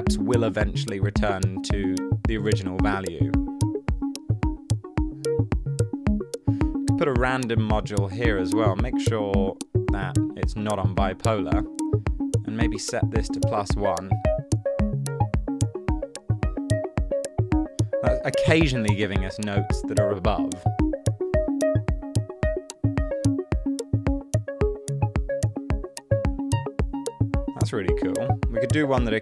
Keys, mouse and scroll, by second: 13.3 1, 13.4 Return.